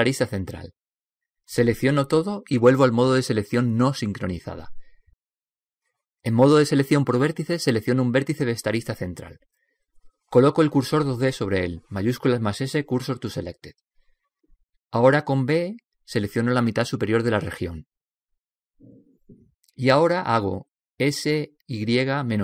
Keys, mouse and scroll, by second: 3.3 a, 3.8 a, 5.4 click, 9.5 right click, 12.2 shift+s, 15.9 b, 21.4 s.